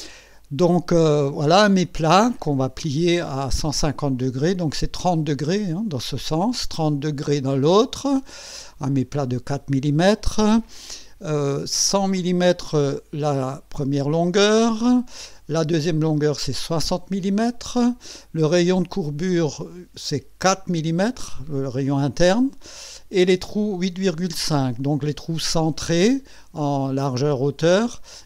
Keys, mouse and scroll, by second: 0.1-1.5 drag.